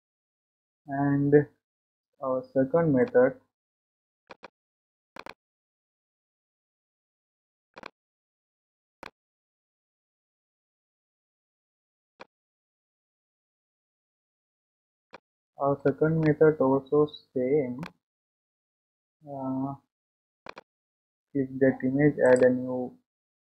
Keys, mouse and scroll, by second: 7.8 click, 9.0-12.1 middle drag, 13.0-13.3 scroll down 3, 13.8-14.9 scroll up 3, 15.1-16.4 shift+middle drag, 17.1-18.8 middle drag, 18.8-19.6 scroll up 2, 19.6-19.9 scroll down 2, 20.6 click.